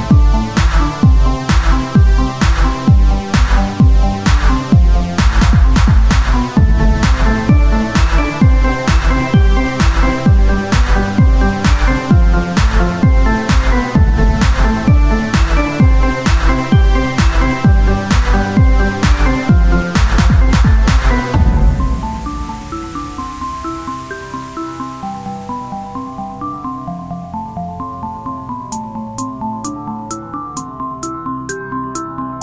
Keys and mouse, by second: 0.7 Tab, 1.1-2.2 drag, 2.2 z, 3.0 z, 3.4 Tab, 8.1 ctrl+z, 10.4 z, 13.1 z, 15.2 z, 15.5 z, 16.3 z, 16.9 z, 18.4 z, 21.7 z, 23.1 click, 23.7 z, 24.9-27.5 drag, 27.5 z, 28.1-32.4 drag, 31.5-32.4 right drag.